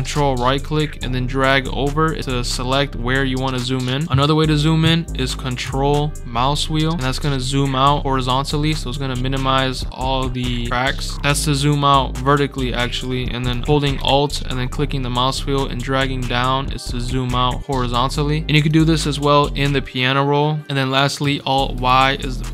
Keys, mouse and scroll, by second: 0.5-3.4 ctrl+right drag, 3.9 ctrl+right click, 10.0 ctrl+scroll down 2, 10.7 ctrl+scroll up 2, 12.8 ctrl+scroll up 2, 13.6 scroll up 2, 14.3 alt+scroll up 2, 17.7-18.5 alt+scroll up 4, 18.5 click, 18.7 scroll down 3, 19.4-20.0 alt+scroll up 4, 21.5 alt+y.